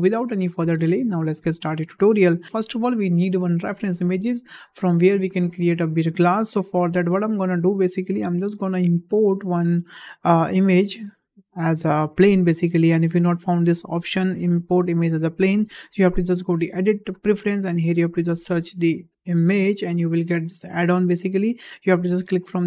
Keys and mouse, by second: 9.1 click, 9.5 shift+a, 16.3-17.4 drag.